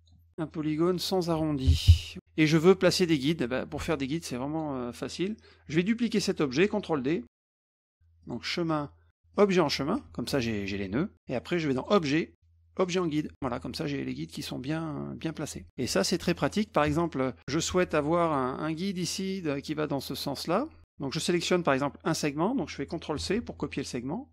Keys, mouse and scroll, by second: 0.8 click, 1.4 ctrl+a, 2.2 click, 4.1 click, 5.5 click, 7.8 ctrl+d, 8.2 click, 9.3 click, 11.7 click, 12.8 click, 15.7 middle click, 16.2 middle click, 16.4 middle click, 16.6 middle click, 16.9 middle click, 17.4 middle click, 18.2 click, 18.5 middle click, 21.4 click, 23.3 ctrl+c.